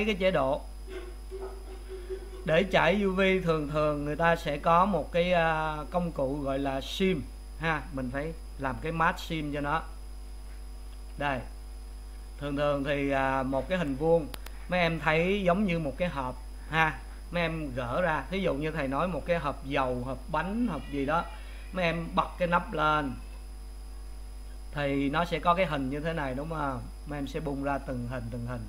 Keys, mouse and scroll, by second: 1.5 click, 12.3-28.6 middle drag.